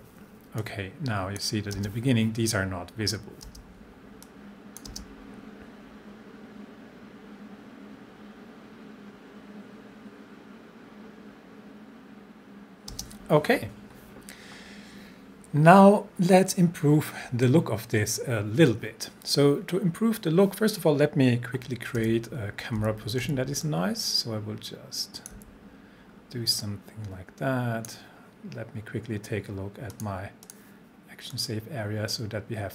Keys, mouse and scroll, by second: 0.6-1.5 click, 1.7 space, 4.3-4.9 click, 4.9 space, 12.9 space, 22.0 c, 22.8 c, 23.2 c, 23.6-25.5 drag, 25.3 c, 26.1-26.6 scroll down 1, 26.6-28.2 drag.